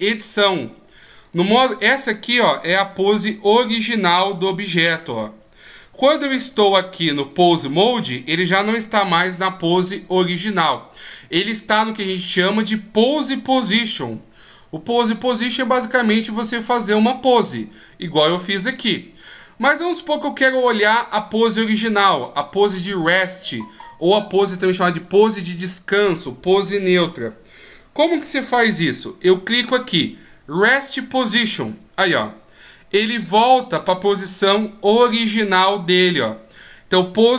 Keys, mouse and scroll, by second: 0.0 click, 0.5 click, 6.4 click, 7.4 click, 31.3 click, 37.2 click.